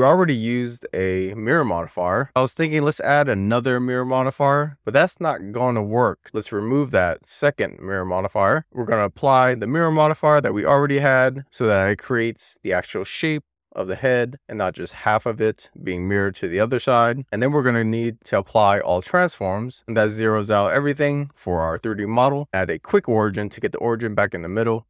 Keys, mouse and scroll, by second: 3.0 click, 3.9 click, 4.4-5.6 middle drag, 6.0 click, 6.7 x, 8.4 click, 12.4 click, 13.1-15.4 middle drag, 15.6 shift+middle click, 16.1 middle click, 17.1 click, 17.5 ctrl+a, 22.6 alt+q, 24.7 middle click.